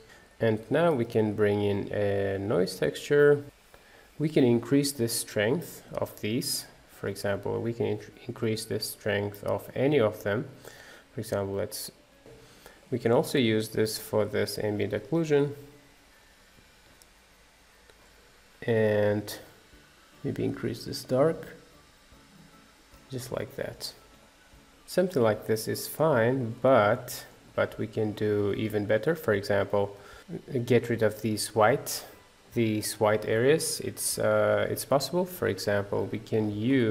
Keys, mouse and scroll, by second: 0.0-3.4 middle drag, 3.6-5.4 middle drag, 5.4-9.1 drag, 9.1 shift+a, 11.3 click, 12.2 middle click, 12.8 click, 13.4 shift+d, 16.5-22.8 drag, 22.8 middle click, 23.2-23.9 scroll up 3, 23.9 middle click, 24.8 middle click, 25.2 scroll up 2, 25.8 shift+middle click, 26.3-27.1 scroll down 1, 27.1-29.7 shift+middle drag, 30.2-35.1 middle drag, 35.1-36.9 drag.